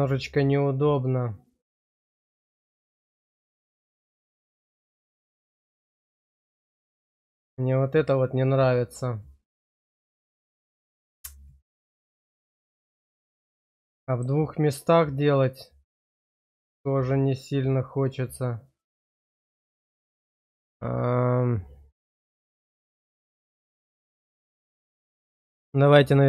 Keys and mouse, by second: 1.8 shift+middle click, 3.6 middle click, 5.1 shift+middle click, 5.5 middle click, 9.6-13.8 middle drag, 14.1 shift+middle click, 15.6-19.8 middle drag, 24.0 middle click, 25.0 middle click, 25.7 click.